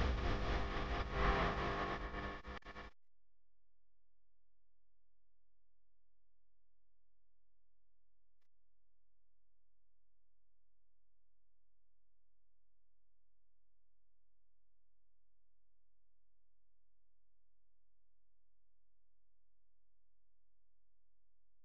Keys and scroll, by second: 0.3-0.9 typing, 8.7 space, 9.2 alt+super+space, 9.5 alt+super+space, 9.6 alt+super+space, 10.1 super+space, 10.2 super+space, 10.3 super+space, 10.4 super+space, 10.5 super+space, 10.5 super+space, 10.6 super+space, 18.8 space, 19.3 alt+super+space, 19.4 alt+super+space, 19.5 alt+super+space, 19.6 alt+super+space, 19.7 alt+super+space, 19.8 alt+super+space, 20.2 alt+super+space, 20.3 alt+super+space, 20.4 alt+super+space, 20.5 alt+super+space, 20.6 alt+super+space, 21.2-21.6 alt+super+space.